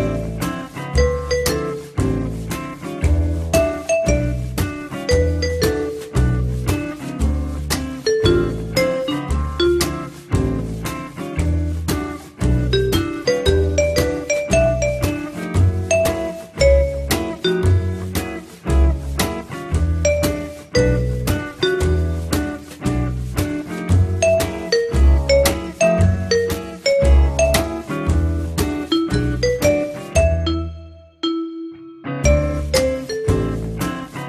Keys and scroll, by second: 2.2 4, 24.2 F3, 25.6 Delete, 28.2 F3.